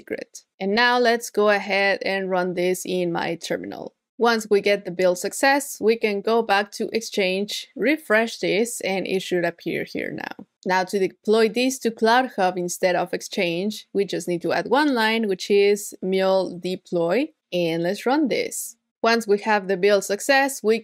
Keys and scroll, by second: 1.2 super+v, 10.5 super+z, 14.7 super+v.